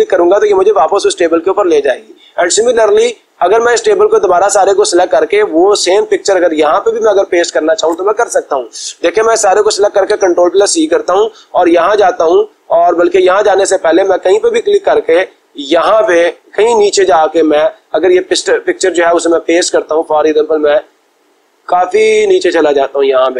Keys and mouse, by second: 3.8-4.8 drag, 7.8 click, 10.0 ctrl+c, 12.3 click, 13.2 click, 14.6-15.7 drag, 19.1-20.1 drag, 23.0 click.